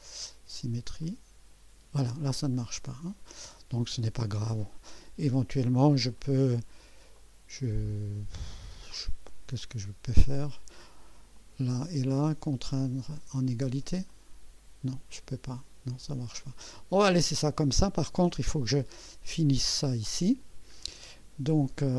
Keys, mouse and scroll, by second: 1.0 click, 3.1 click, 6.1 right click, 7.2 click, 11.3 click, 12.6 click, 14.1 click, 15.5 click, 19.8-20.9 middle drag.